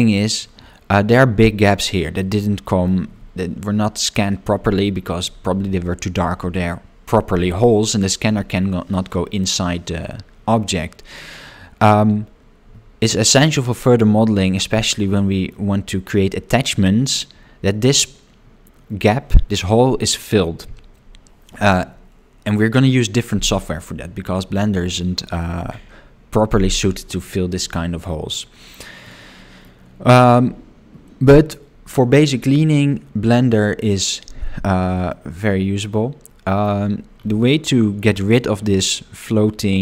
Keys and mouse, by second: 2.2 middle click, 14.5 shift+middle click, 15.1 middle click, 29.1 middle click, 32.2 shift+middle click, 35.2-36.7 middle drag, 39.7 middle click.